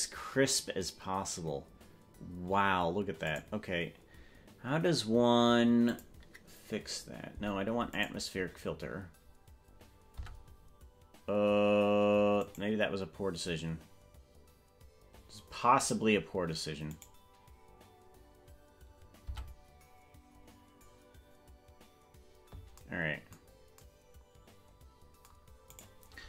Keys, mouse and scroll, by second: 3.4 right click, 5.9 click, 8.3 right click, 13.9 Tab, 14.5 right click, 17.5 right click, 23.3 Tab, 25.9 right click.